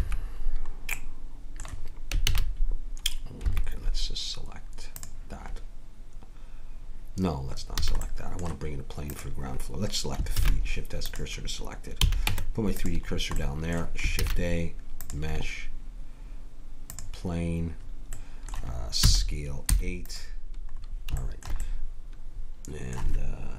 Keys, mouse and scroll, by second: 0.0 Escape, 2.3 shift+a, 5.0-6.9 drag, 7.9 a, 8.0 middle click, 9.1-10.4 drag, 10.4 shift+s, 12.0 a, 12.3 Tab, 14.2 shift+a, 18.2 middle click, 19.0 s, 21.2 middle click, 21.9 middle click.